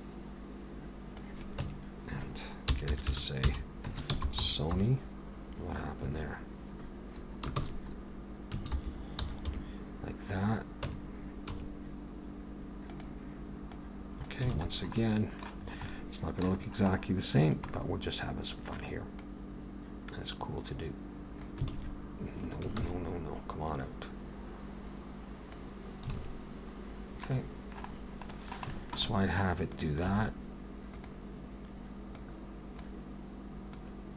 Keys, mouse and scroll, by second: 1.6 Tab, 2.7 BackSpace, 2.9 BackSpace, 3.1 BackSpace, 3.5 BackSpace.